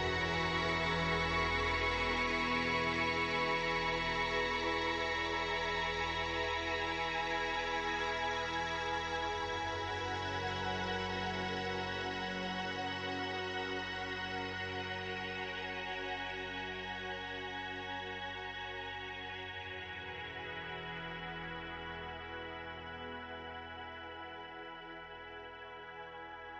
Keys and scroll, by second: 2.6 space, 3.7 space, 17.0 space, 21.4 space.